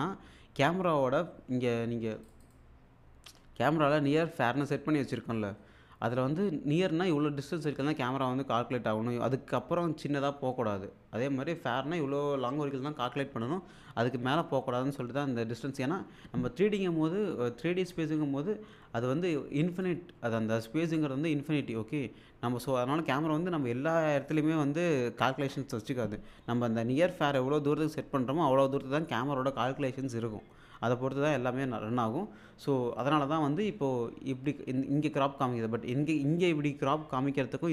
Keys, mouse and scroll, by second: 2.3 click.